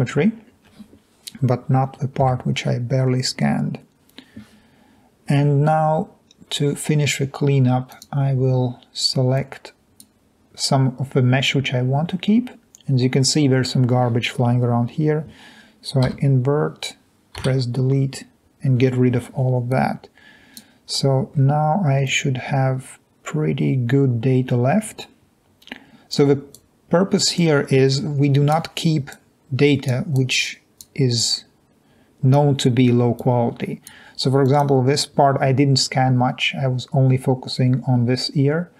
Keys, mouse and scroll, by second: 2.3 Delete, 9.4 click, 17.4 Delete, 19.7 click, 20.9 middle click, 28.0 click, 29.2-29.9 drag, 30.2 drag, 31.2 click, 33.2 click, 34.5 drag.